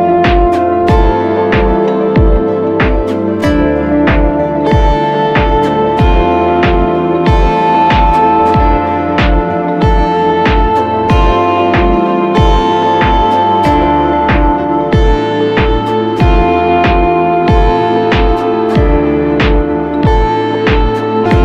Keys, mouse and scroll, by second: 6.6 typing, 12.7-13.8 typing.